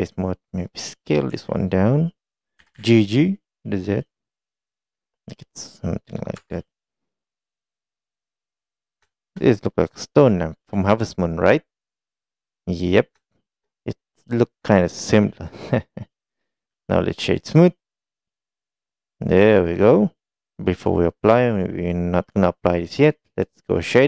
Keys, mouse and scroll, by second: 0.1 click, 0.8 middle click, 4.4 click, 4.6-6.4 middle drag, 7.0-8.4 middle drag, 9.2 shift+middle click, 9.5-10.9 middle drag, 11.5-12.6 middle drag, 13.4 shift+middle click, 13.8-14.9 middle drag, 16.9 right click, 18.2-19.7 middle drag.